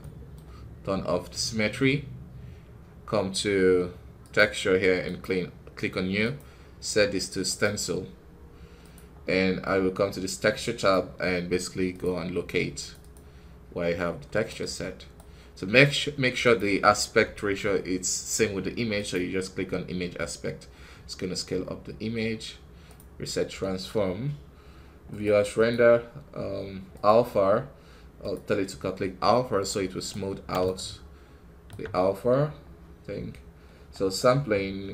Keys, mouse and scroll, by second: 1.2-14.4 drag, 14.4-18.4 right drag, 18.4-29.6 drag, 29.6-34.9 right drag.